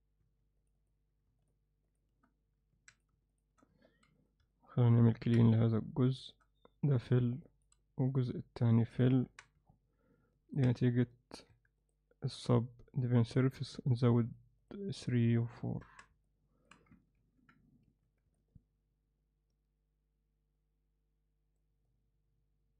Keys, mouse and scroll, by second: 2.8 alt+a, 4.5 middle click, 7.5 alt+middle click, 9.3 Tab, 9.7-10.6 middle drag, 11.1 middle click, 12.1-16.1 right drag, 16.3 alt+middle click, 17.2 ctrl+r, 18.4-21.6 alt+middle drag, 21.9-22.7 alt+middle drag.